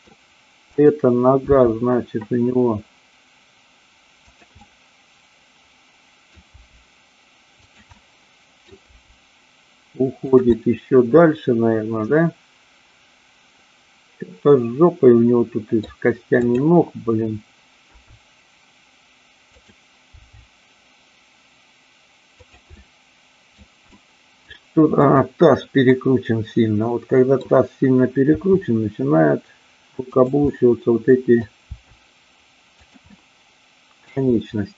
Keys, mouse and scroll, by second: 0.6-1.6 drag, 1.6 g, 4.3 click, 4.5-6.3 middle drag, 4.5-5.5 scroll up 1, 5.5-6.3 scroll up 1, 6.5 g, 7.8 click, 7.9-8.5 middle drag, 7.9-8.5 scroll up 1, 10.3 click, 10.5-15.9 middle drag, 16.4-17.4 drag, 17.8 g, 22.5 click, 22.8 middle click, 24.0 middle click, 25.0-26.0 drag, 26.0-27.4 middle drag, 28.3 r, 30.2 click, 30.4-31.4 middle drag, 31.6 r, 32.8 click, 33.0-34.2 middle drag.